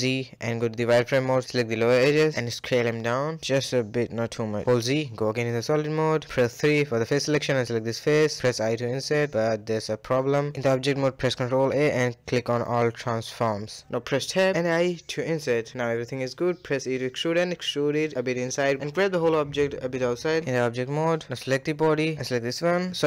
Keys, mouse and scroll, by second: 0.9 click, 2.4 s, 4.7 z, 5.3 middle click, 6.2 scroll up 1, 6.4 click, 18.2 g, 20.6 a, 20.8 a, 21.0 scroll down 2, 21.2-21.8 middle drag, 21.8 click, 22.7 shift+click.